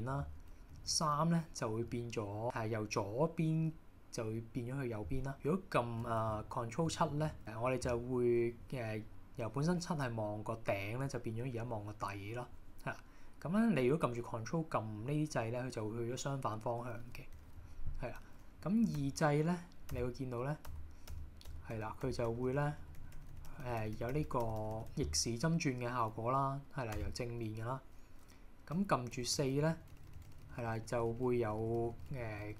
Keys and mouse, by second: 0.8 ctrl+KP_3, 7.0 ctrl+KP_7, 17.5 KP_1, 19.0-24.6 typing, 27.0 KP_1, 28.8-32.5 typing.